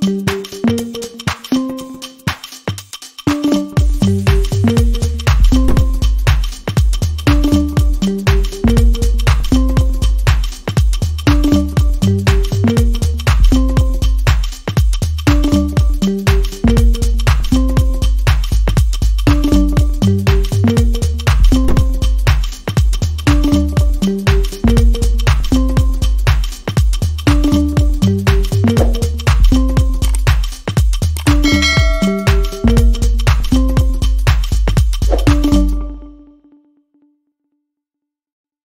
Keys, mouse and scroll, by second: 6.4 alt+click, 19.9 double click, 30.5 ctrl+click, 36.1 double click, 37.6-38.5 typing.